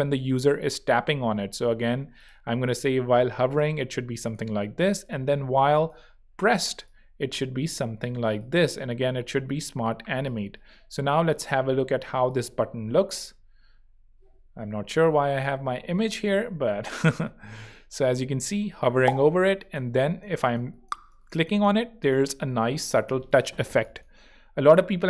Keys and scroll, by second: 14.5 Right, 15.6 r.